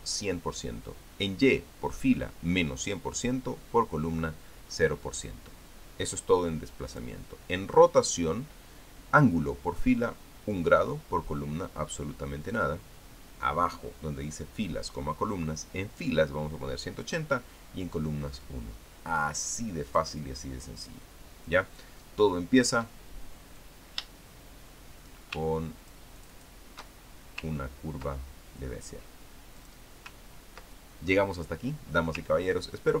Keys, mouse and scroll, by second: 7.7 click, 20.6-22.0 drag, 23.4 click, 24.4-26.8 drag, 26.9 ctrl+shift+click, 28.3-28.6 ctrl+scroll up 2, 30.4 click, 31.0-31.7 ctrl+scroll down 2, 31.9-33.0 drag.